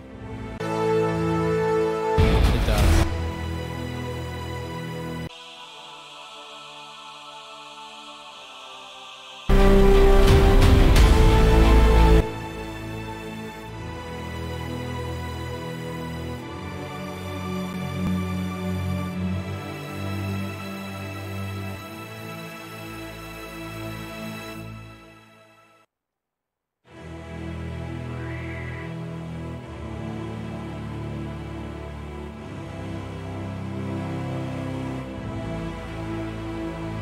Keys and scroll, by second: 26.0 space, 26.3 space.